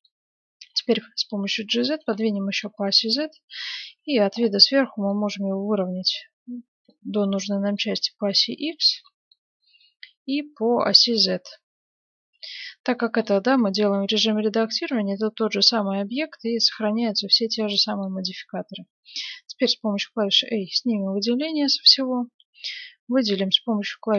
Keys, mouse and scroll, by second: 0.6 g, 1.3 middle click, 2.2-5.1 middle drag, 4.0 KP_7, 5.1-7.0 drag, 7.7-10.8 middle drag, 9.8-13.2 drag, 13.2-19.3 middle drag, 18.3 a, 21.4-24.1 middle drag.